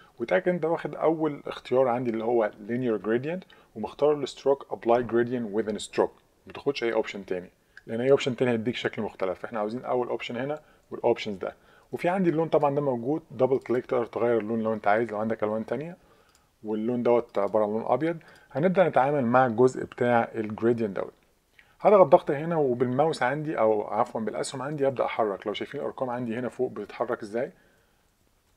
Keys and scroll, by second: 23.0 Page_Down, 23.2 Page_Down, 23.3 Down, 24.5 Up, 24.8 Up, 24.9 Up, 25.8 Up.